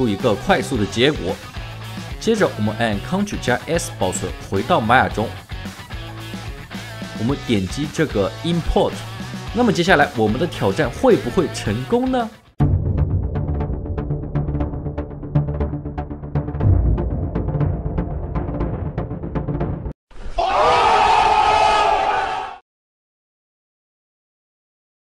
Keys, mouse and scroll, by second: 0.9 scroll down 1, 1.2 typing, 1.7 alt+right click, 1.9 alt+middle click, 3.4 ctrl+s, 21.8 alt+middle click, 22.0 alt+right click, 22.7 alt+middle click.